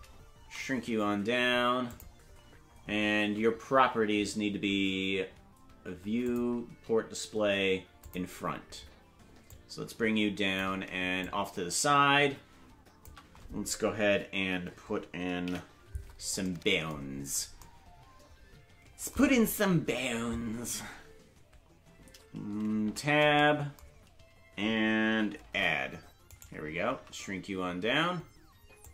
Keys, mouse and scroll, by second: 0.4 s, 6.2 click, 8.0 click, 9.5-10.6 drag, 11.2-13.0 shift+drag, 15.4 KP_Decimal, 17.0-17.6 scroll down 1, 17.6-17.9 scroll down 5, 23.3 Tab, 25.4 shift+a, 26.3 right click, 26.9 s.